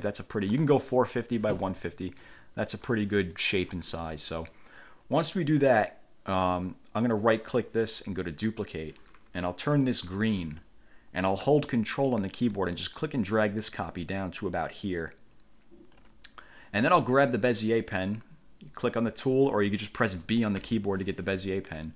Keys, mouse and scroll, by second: 0.2 click, 2.0 click, 3.5 click, 4.2 middle click, 7.2 right click, 8.7 click, 10.1 click, 12.7-16.3 ctrl+drag, 20.8 b.